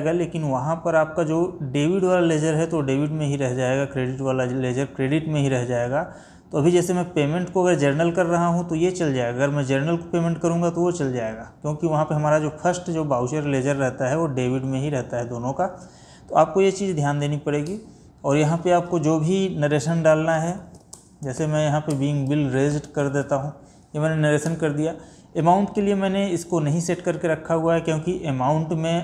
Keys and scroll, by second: 21.0 space, 22.0 space.